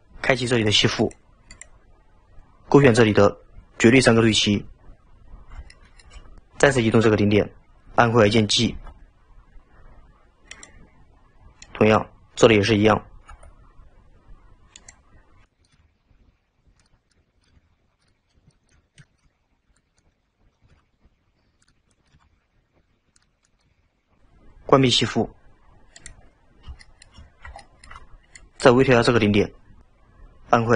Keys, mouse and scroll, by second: 1.0 click, 1.6-4.6 drag, 5.3-5.8 scroll up 2, 5.8-6.4 middle drag, 8.8 g, 11.7 click, 13.4 g, 15.5 click, 15.8 g, 17.2 drag, 17.6 g, 18.2-18.6 scroll down 2, 18.6 shift+middle drag, 18.8 scroll up 2, 19.1-19.8 shift+middle drag, 19.8 click, 20.8 g, 22.0 click, 22.2 g, 23.5 drag, 23.7 g, 26.0 click, 26.4-26.8 scroll down 4, 26.8-27.2 shift+middle drag, 27.2-27.6 scroll up 1, 27.6 shift+middle drag, 27.8-28.4 middle drag, 28.4 click.